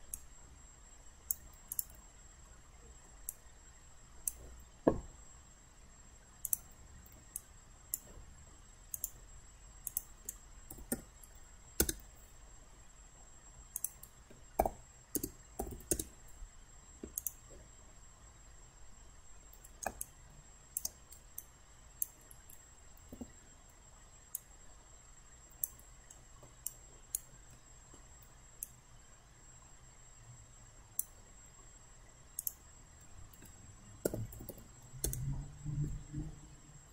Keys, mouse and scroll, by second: 0.1 alt+click, 1.7 click, 2.5 alt+middle click, 3.3 alt+click, 6.5 click, 7.4 alt+click, 8.9 click, 10.9 1, 11.9 Return, 13.8 click, 15.2 BackSpace, 15.9 Return, 17.2 click, 18.3-20.0 middle drag, 20.0 click, 21.4 alt+right click, 23.1 alt+w, 24.4-25.7 drag, 26.1 alt+middle click, 26.7 alt+right click, 27.5 alt+middle click, 28.6-31.3 drag, 34.1-34.5 typing, 35.1 Return.